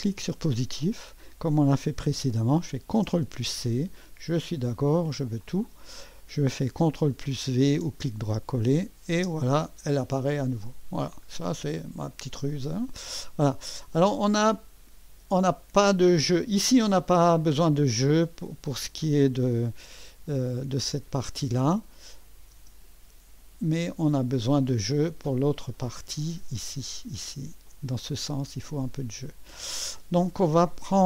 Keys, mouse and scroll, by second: 0.0 click, 3.0 ctrl+c, 5.4 click, 7.6 ctrl+v, 8.8 click, 9.2 space, 10.0-11.1 drag, 17.0 click, 18.6-19.8 drag, 20.8 space, 21.9 click, 22.5 space, 25.9 click, 27.7 click.